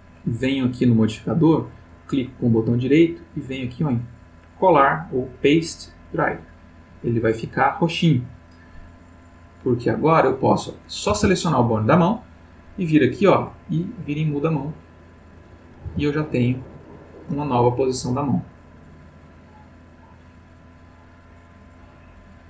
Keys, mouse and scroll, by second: 2.2 right click, 6.1 click, 9.9 click, 11.1 r, 12.0 click, 13.3-15.4 drag, 15.8 r, 17.1 click, 18.2-20.1 drag, 21.6 click.